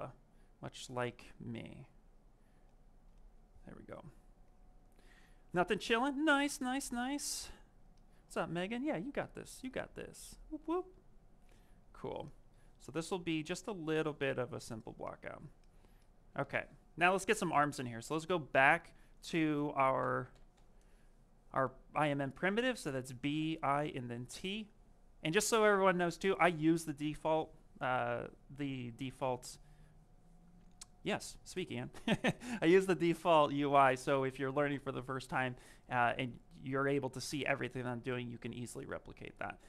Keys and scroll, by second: 23.7 t.